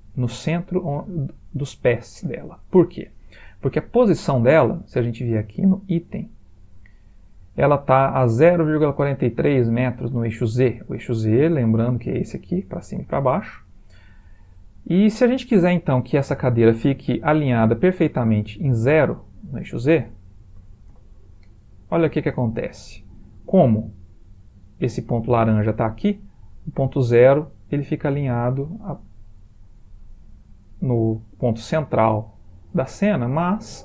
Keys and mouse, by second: 2.4 middle click, 2.6-3.8 middle click, 3.6 middle click, 4.0 middle click, 4.2 middle click, 5.7 click, 11.6 g, 17.8 middle click, 19.5 click, 22.3 middle click, 26.2 middle click, 26.4-26.8 middle click, 26.7 middle click, 29.2 middle click, 29.4 middle click, 29.6 middle click, 29.8 middle click, 29.9 middle click, 32.2-33.1 middle click, 32.9 middle click.